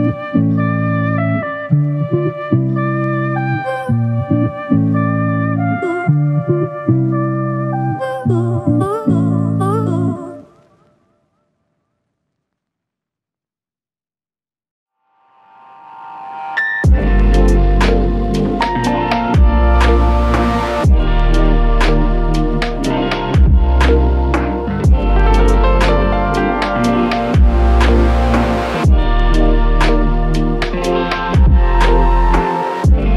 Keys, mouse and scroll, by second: 0.1 ctrl+click, 2.6 ctrl+click, 7.0 ctrl+click, 13.2 ctrl+click, 17.7 alt+click, 33.0 ctrl+scroll up 1.